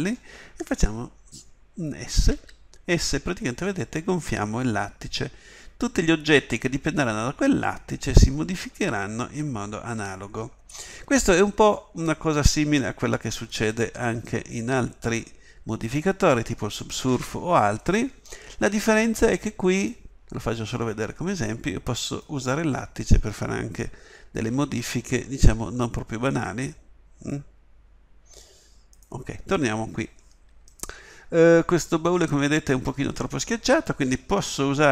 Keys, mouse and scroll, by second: 2.3 s, 24.5 g.